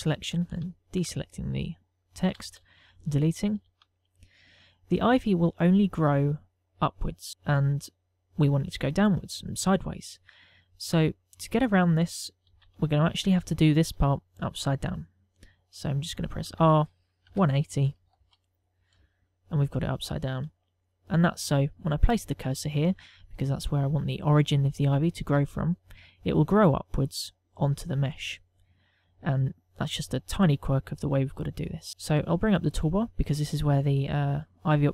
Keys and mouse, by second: 1.2 shift+click, 2.9 Delete, 3.8 ctrl+middle click, 4.3 shift+middle click, 4.6 middle click, 11.5 click, 13.1 KP_1, 13.8 shift+middle click, 14.3 ctrl+middle click, 17.2 r, 20.4 shift+middle click, 22.5 right click, 24.2 right click, 32.8 t.